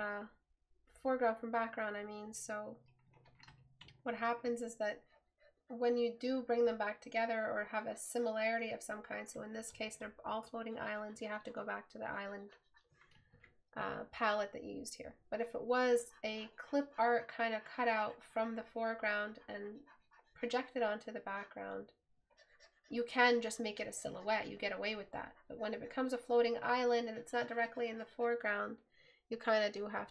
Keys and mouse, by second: 0.3 right click.